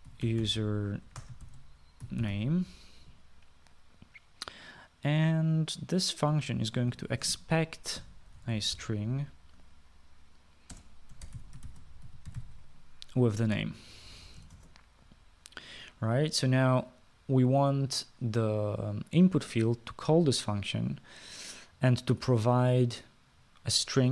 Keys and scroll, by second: 0.0-3.8 typing, 7.7-10.2 typing, 11.7-13.8 typing, 15.5 {, 15.5 shift+Return.